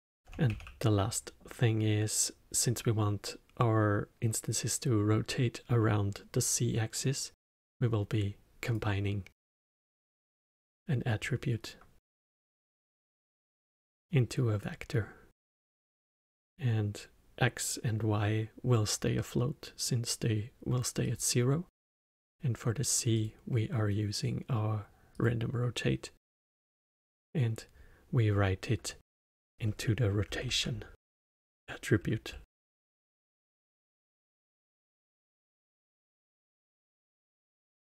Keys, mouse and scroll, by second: 0.4 shift+a, 13.4-18.8 drag, 23.1-26.2 drag, 26.4-29.5 drag, 35.0-37.9 alt+middle drag.